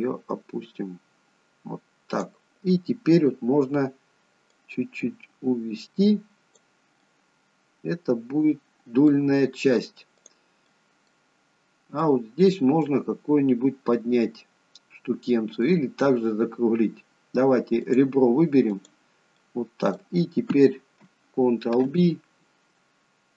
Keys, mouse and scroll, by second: 4.7 click, 7.1 middle click, 10.3 click, 10.8 middle click, 11.5-12.1 scroll up 1, 12.1 middle click, 12.1 scroll up 2, 14.0 middle click, 15.1 scroll down 1, 15.4 middle click, 18.0 click, 19.0 click, 19.5 middle click, 21.9 ctrl+b.